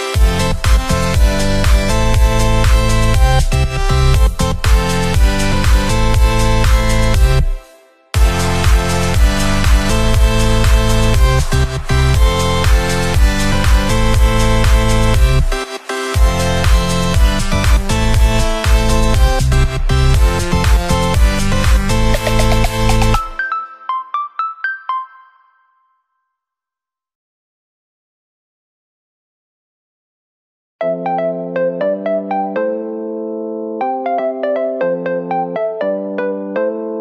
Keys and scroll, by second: 16.9 ctrl+[, 18.1 Up, 20.1 ctrl+0, 24.1 ctrl+=, 26.3 ctrl+=, 29.3 ctrl+0.